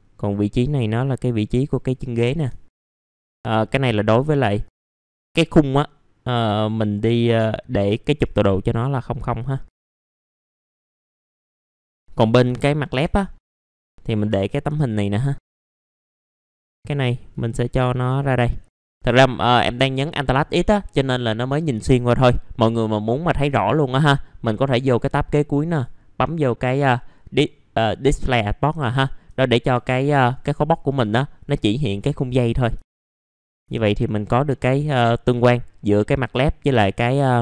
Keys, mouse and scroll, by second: 2.1 middle click, 2.2 scroll down 1, 2.6 middle click, 2.8 alt+middle click, 3.0 middle click, 3.3 click, 3.5 scroll down 1, 3.8 alt+middle click, 4.5 click, 4.7 alt+middle click, 8.6-11.6 drag, 11.7 alt+middle click, 11.9 click, 13.2 scroll down 1, 13.5 F3, 13.5 scroll up 1, 13.7-15.9 drag, 15.9-16.2 scroll up 1, 16.2 click, 16.4 scroll down 1, 16.6 click, 16.7-17.3 scroll up 1, 17.4-18.8 drag, 18.8 1, 19.1 middle click, 19.3 scroll down 1, 24.7-26.7 drag, 28.8 alt+middle click, 29.8 alt+middle click, 29.9-30.3 scroll down 1, 30.3 click, 31.7 click, 32.8 alt+middle click, 34.0 middle click, 34.5 scroll up 1, 36.1-36.7 scroll down 1.